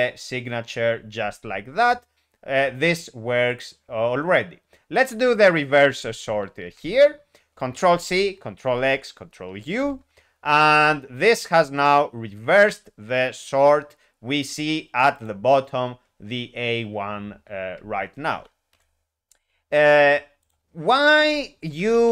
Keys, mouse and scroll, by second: 3.5 click, 5.2 double click, 5.9 s, 6.6 ., 9.8 ctrl+u, 15.1 click, 20.4 click, 21.1 Delete, 21.7 typing.